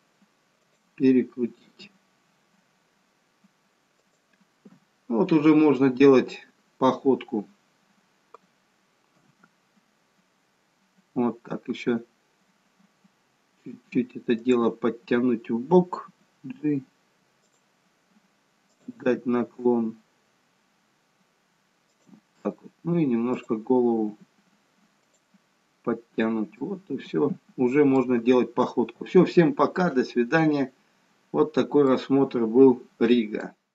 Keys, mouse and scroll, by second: 2.0 r, 5.5 scroll down 1, 5.8 middle click, 9.3 KP_1, 14.6 click, 16.3 g, 18.8 click, 19.6 g, 23.6 click, 24.4 g, 26.7 middle click, 30.2-30.6 scroll up 1, 30.6 scroll down 1, 31.5-31.9 scroll down 1, 32.1 middle click.